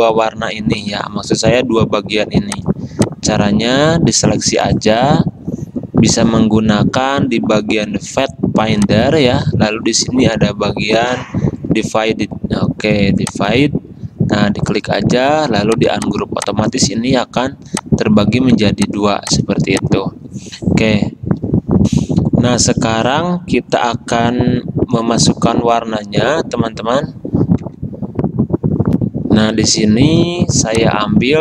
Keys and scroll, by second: 17.2 ctrl+z, 18.4 ctrl+z, 22.0 F10, 29.1 F10.